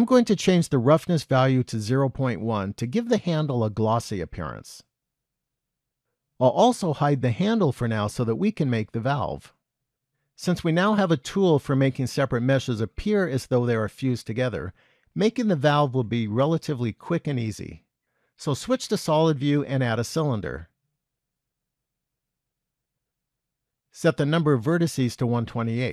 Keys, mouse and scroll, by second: 1.2-3.3 scroll down 5, 3.3 click, 8.6 click, 17.9 z, 20.7 shift+a, 25.4 click.